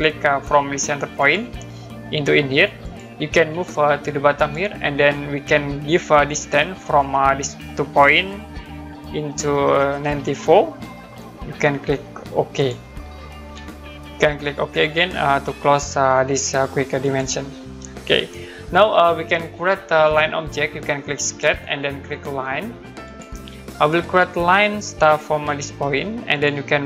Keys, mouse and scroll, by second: 1.2 click, 2.8 click, 4.3 click, 10.0-10.8 typing, 12.5 click, 17.0 click, 17.8 middle click, 21.2 click, 23.0 click, 26.3 click.